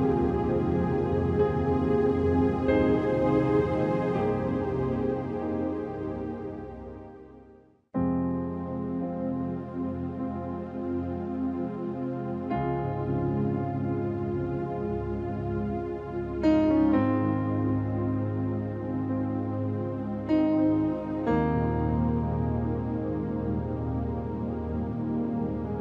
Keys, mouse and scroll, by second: 0.3 click, 3.7 click, 3.9 click, 5.5 click, 6.5 click, 6.7 ctrl+t, 7.0 click, 8.0 click, 8.7 Return, 9.4 click, 10.4 ctrl+t, 11.2-13.3 drag, 13.3 Return, 14.1-19.1 ctrl+drag, 19.6-21.6 typing, 21.9 click, 23.5-24.8 typing, 25.1 click.